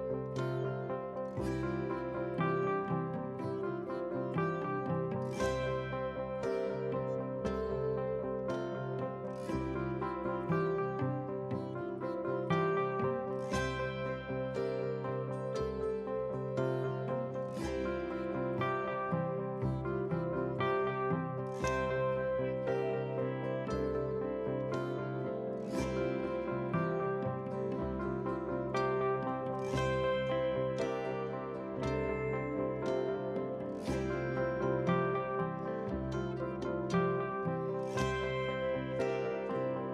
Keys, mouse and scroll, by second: 0.0 KP_3, 0.6 r, 1.7 KP_7, 2.0 scroll down 2, 2.2 shift+middle click, 3.2 s, 4.2 g, 5.0 scroll up 2, 5.2 shift+middle click, 5.5 g, 6.2 shift+middle click, 6.6 middle drag, 7.0 KP_3, 7.2 scroll up 2, 7.5 shift+middle click, 8.1 r, 9.8 scroll down 1, 10.0-10.3 middle drag, 11.0-11.4 middle drag, 11.5 shift+middle click, 11.9 g, 13.3 scroll down 1, 13.7 g, 14.4 middle click, 14.8 scroll down 1, 15.0 middle drag, 15.4 click, 15.8 click, 16.2 scroll down 2, 16.3 click, 16.5 middle drag, 16.8 middle drag, 17.6 scroll down 1, 18.2 ctrl+z, 18.5 click, 19.4 ctrl+s.